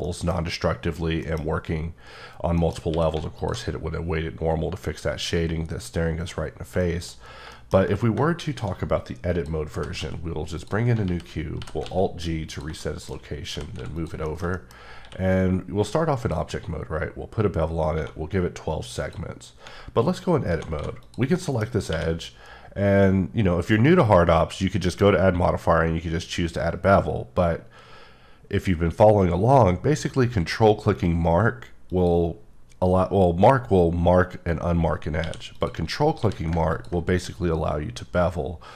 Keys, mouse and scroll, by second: 0.0 middle click, 0.9 scroll down 2, 1.2 middle click, 2.5 middle click, 2.9 q, 3.4 alt+click, 6.5 scroll down 1, 6.8 shift+middle click, 7.7 scroll down 1, 8.3 shift+a, 9.3 click, 9.8 g, 10.0 x, 10.6 click, 11.0 g, 11.8 x, 12.5 click, 12.8 middle click, 13.5 g, 13.7 x, 13.9 click, 14.3 shift+middle click, 14.8 scroll up 1, 15.4 q, 16.2 click, 16.9-17.9 scroll up 9, 17.9 1, 19.0 click, 20.8 typing, 21.0 click, 21.4 middle click, 21.9 q, 31.9 q, 32.7 click, 35.2 q, 35.5 click, 36.2 q, 36.7 click.